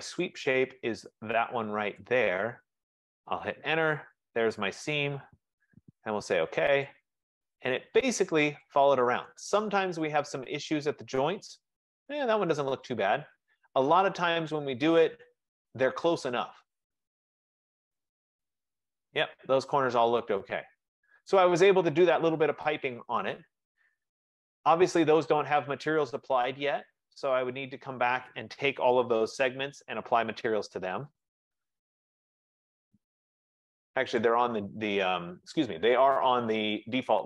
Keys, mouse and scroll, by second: 0.6 middle click, 0.8 middle click, 1.0 middle click, 2.0 click, 3.4 Return, 4.6 Return, 6.9 click, 8.2 middle click, 8.5 middle click, 9.6 right click, 10.2 middle click, 10.7 middle click, 10.9 middle click, 12.5 middle click, 12.7 middle click, 12.9 middle click, 14.1 right click, 14.7 middle click, 14.9 middle click, 15.1 middle click, 15.9 middle click, 16.2 scroll down 2, 16.3-17.1 scroll down 2, 17.7 right click, 18.1-18.7 scroll down 1, 18.7 scroll up 1, 19.2-19.8 scroll up 3, 19.8-20.5 scroll down 1, 20.5-21.4 scroll down 1, 21.4 right click, 24.7 middle click, 25.1 middle click, 27.7 click, 31.3 shift+click, 32.6 click, 34.3 click, 36.9 click.